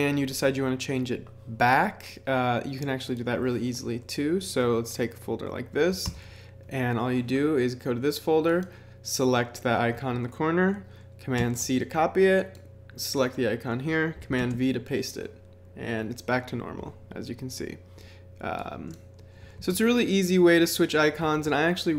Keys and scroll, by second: 6.0 super+i, 11.4 super+c, 14.4 super+v, 19.5 super+c, 21.3 super+v.